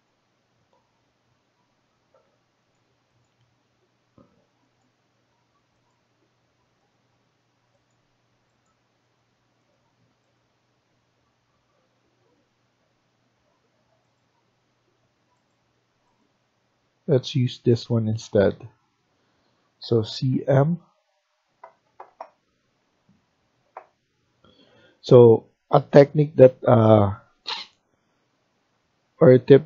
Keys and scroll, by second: 19.7-20.1 typing.